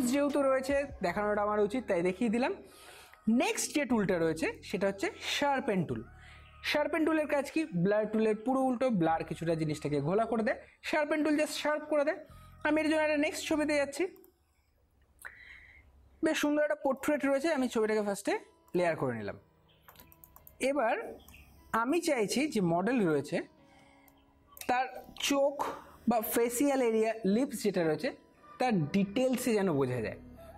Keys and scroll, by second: 21.1 space.